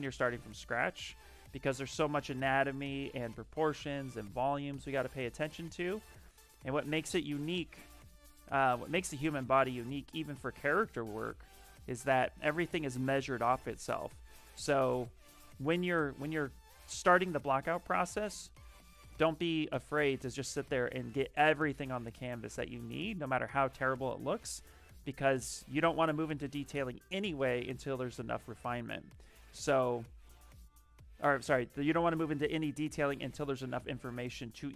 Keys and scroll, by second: 0.6 s, 1.9 b, 2.3 s, 5.0 ctrl+z, 7.3 ctrl+z, 17.1-18.9 typing, 29.3 s.